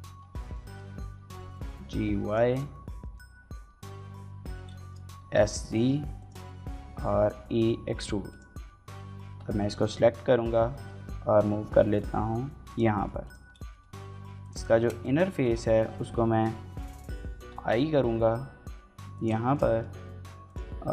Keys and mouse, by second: 0.2 shift+middle click, 0.4 middle click, 1.2 g, 1.2 y, 2.0 click, 2.3 shift+middle click, 2.5 middle click, 4.4 l, 4.6 shift+click, 4.9 s, 5.1 z, 6.0 click, 6.3 middle click, 6.8 e, 8.1 click, 9.1 l, 9.5 middle click, 9.8 g, 10.3 y, 11.0 x, 12.5 click, 12.8 middle click, 13.1 click, 14.2 click, 14.2 3, 14.6 middle click, 14.8 middle click, 18.9 click, 18.9 i, 19.3 middle click, 19.5 middle click, 20.2 click.